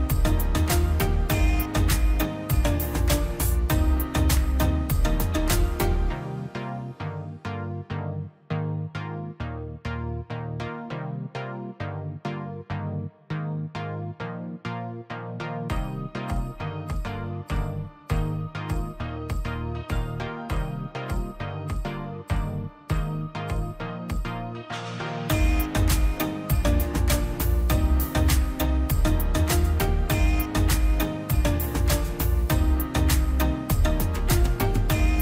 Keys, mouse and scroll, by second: 0.0-3.8 drag, 3.8 scroll down 1, 4.7 click, 5.3 scroll down 1, 5.4-6.7 middle drag, 6.7-7.3 scroll up 2, 6.9 click, 7.9 click, 9.2 scroll up 1, 9.5 middle click, 9.9 scroll up 1, 11.0-12.6 middle drag, 12.6 click, 12.8 scroll up 1, 14.5-15.2 scroll down 1, 15.2-17.5 middle drag, 17.5 click, 20.6 middle click, 21.0 scroll up 1, 21.7 click, 24.1 scroll down 1, 24.8 click, 26.5 click, 27.4 scroll up 1, 28.0 click, 30.7 click, 31.8 scroll down 1, 32.2 middle click, 33.0-33.4 scroll, 33.4 middle click, 33.5 scroll down 1, 35.0 scroll up 1.